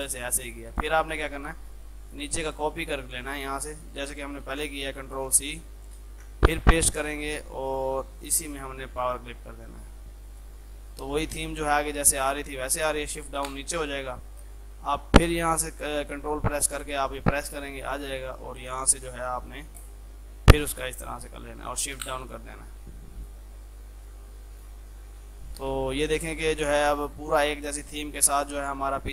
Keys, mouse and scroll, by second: 0.9 click, 4.5 ctrl+c, 5.3 ctrl+click, 6.2 ctrl+v, 7.7 right click, 8.2 click, 13.4 shift+Page_Down, 14.2 F3, 15.7 ctrl+click, 16.8-19.8 ctrl+right drag, 19.8 click, 22.0 shift+Page_Down, 24.9 shift+F2, 26.7 click.